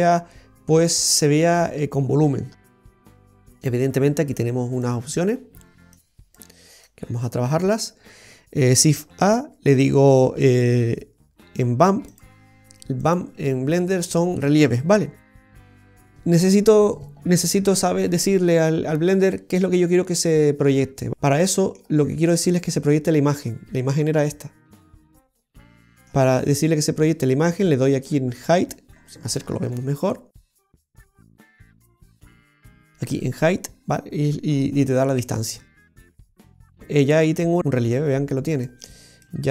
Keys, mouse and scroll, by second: 2.3-3.2 scroll down 10, 3.2 middle click, 4.8 click, 5.9 click, 6.9 click, 9.0 shift+a, 14.0 middle click, 21.2 middle click, 21.2 scroll down 2, 25.7 middle click, 27.1 click, 29.1-30.4 scroll up 10, 30.4 middle click, 30.4 scroll up 1, 31.0-31.4 scroll up 5, 31.4 middle click, 32.1-32.7 scroll up 2, 35.3 middle click, 37.4 click, 39.0-39.3 scroll down 3, 39.3 middle click.